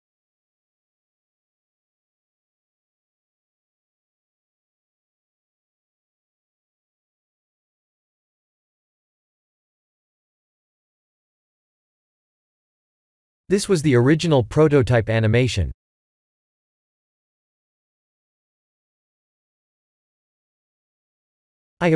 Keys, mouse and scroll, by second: 0.4 click, 6.8 click, 7.6 click, 11.7 click, 12.8 click, 15.1 click, 16.0-16.8 drag, 19.1 click, 20.2 shift+z, 20.4-21.1 middle drag, 21.5 KP_1.